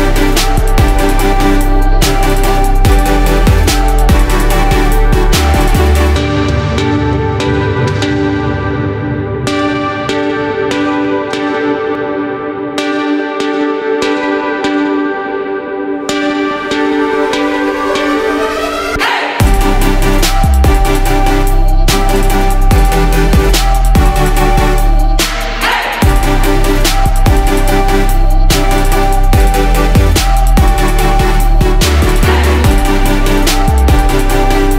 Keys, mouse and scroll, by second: 25.0 Up, 25.2 Up, 26.7 Left, 27.2 Left, 27.7 Up, 28.1 Up, 28.4 Up, 28.6 typing, 30.0-34.7 drag.